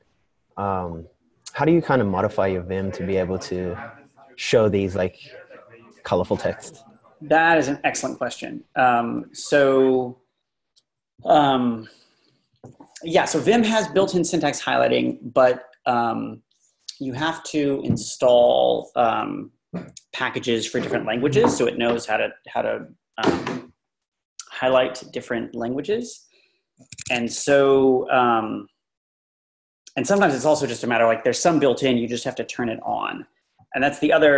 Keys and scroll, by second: 27.0 ⟲.